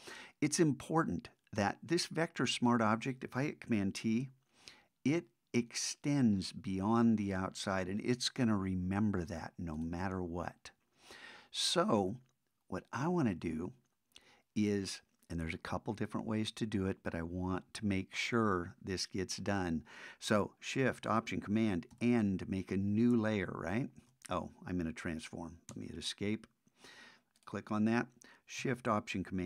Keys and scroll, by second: 4.1 super+t, 21.9 alt+shift+super+n.